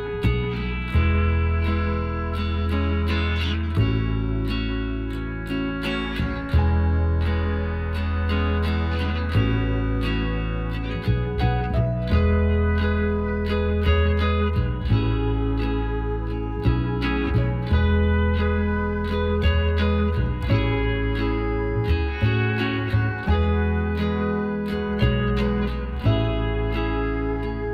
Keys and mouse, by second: 2.2 ctrl+r, 3.5-4.8 right drag, 4.2 b, 5.8 g, 9.2 b, 10.1 b, 11.2 b, 14.8 b, 16.8 b, 19.0-23.2 middle drag, 19.9 e, 24.8-26.6 drag, 26.8-27.7 drag.